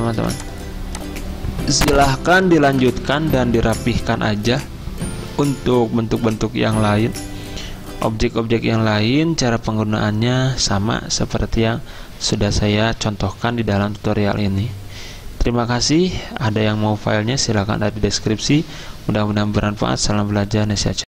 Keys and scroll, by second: 0.1 v, 2.7 Delete, 6.0-6.8 typing.